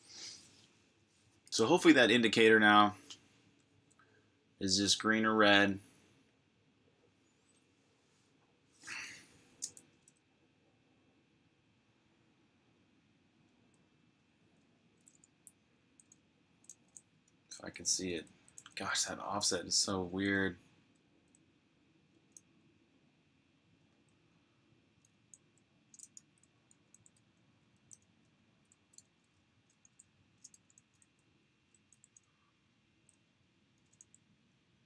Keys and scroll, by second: 14.0-19.0 typing, 21.0-22.0 typing, 23.9 typing, 24.9-30.2 typing.